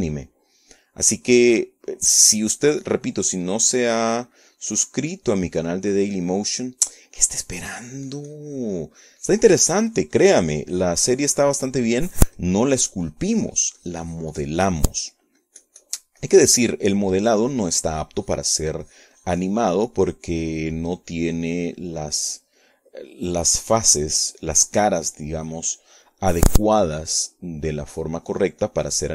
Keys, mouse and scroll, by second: 0.5 right click, 1.1 scroll up 1, 1.4 scroll down 1, 1.7 scroll up 1, 3.1-4.9 drag, 5.6-7.6 drag, 7.7 middle click, 8.5 middle click, 9.1-17.3 drag, 21.7 middle click, 22.9-28.2 drag, 28.3 middle click, 28.9 middle click.